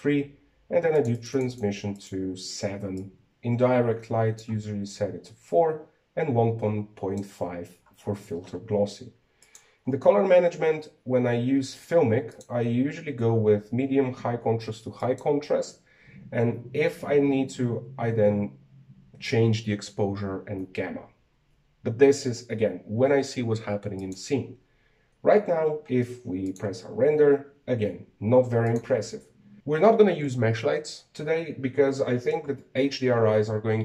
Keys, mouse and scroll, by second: 2.1-3.5 drag, 4.1-9.1 drag, 9.1-9.8 scroll down 12, 10.5 click, 11.0 scroll down 3, 13.4-16.5 drag, 25.1 click, 27.8 click, 29.6 click.